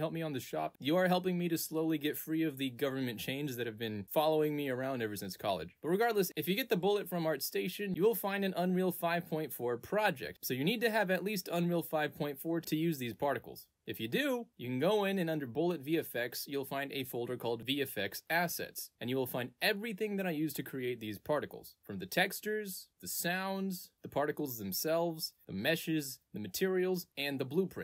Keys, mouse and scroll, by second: 5.8 click, 6.9 click, 8.7 click, 13.8 ctrl+space, 15.6 click, 15.9 click, 18.7 click, 19.0 click, 20.0 click, 20.4 click, 20.8 click, 21.1 click, 21.4 click, 21.7 click, 21.8 click, 22.5 click, 22.9 click, 23.0 click, 23.8 click, 24.1 click, 25.1 click, 25.3 click, 26.1 click, 26.4 click, 27.0 click, 27.3 click.